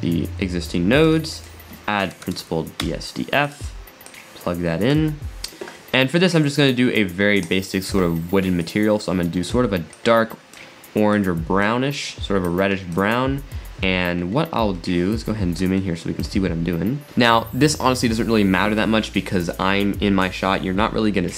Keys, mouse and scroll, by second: 1.1 shift+a, 4.2 click, 7.4 click, 14.7 scroll up 2, 15.8-16.5 shift+middle drag, 16.5 scroll up 1, 17.0-18.8 middle drag.